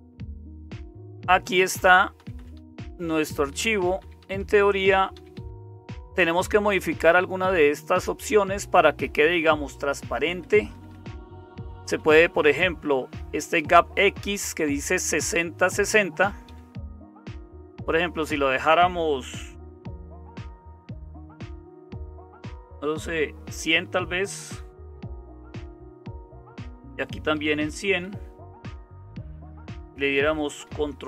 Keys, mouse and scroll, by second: 0.0-31.0 typing, 0.1 Down, 0.3 Down, 1.1 Down, 10.3 Down, 10.5 Down, 10.7 Down, 10.9 Down, 11.1 Down, 11.7 Up, 11.9 Up, 12.6 Right, 12.8 Right, 13.0 Right, 13.1 Right, 13.3 Right, 14.4 Up, 14.4 Right, 15.8 Right, 16.4 Down, 16.9 Down, 17.1 Up, 17.7 Up, 25.8 Down, 26.1 Left, 26.4 Left, 28.3 Delete, 30.6 ctrl+o.